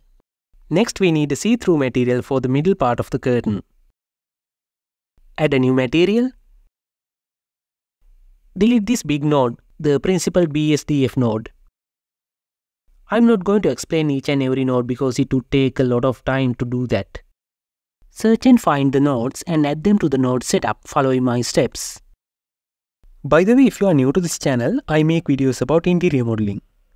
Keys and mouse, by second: 3.6 click, 5.6 click, 8.1 KP_Decimal, 10.3 click, 10.7 Delete, 11.1 drag, 13.1-14.6 drag, 14.8 click, 15.8 click, 18.6 click, 19.3 d, 19.9 click, 21.5 click, 22.1 f, 22.5 click, 23.0-24.1 drag, 24.3 Return, 25.1-26.9 drag.